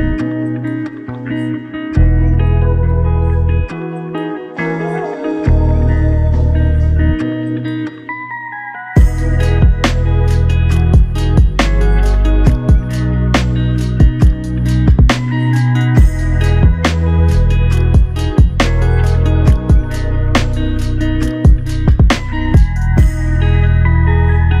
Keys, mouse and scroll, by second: 1.4 ctrl+shift+click, 2.9 ctrl+shift+click, 9.0 ctrl+shift+click, 10.8 ctrl+shift+click, 12.4 ctrl+shift+click, 18.2 ctrl+shift+click.